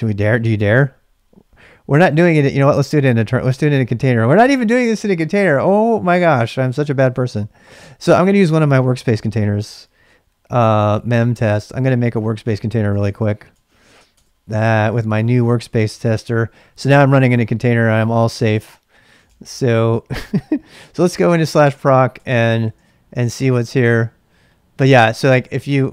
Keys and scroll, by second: 2.3-3.5 BackSpace, 6.8-7.8 typing, 10.5-12.1 typing, 12.9 Return, 13.1 Return, 13.2 Return, 13.5 Return, 14.1 Return, 18.1-19.6 typing, 20.7-23.3 typing, 24.8-25.9 typing.